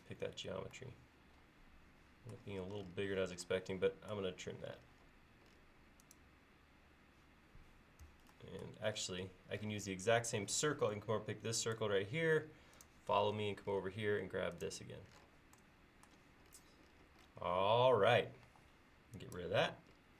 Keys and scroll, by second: 8.1 Escape, 11.0 space, 18.5 e.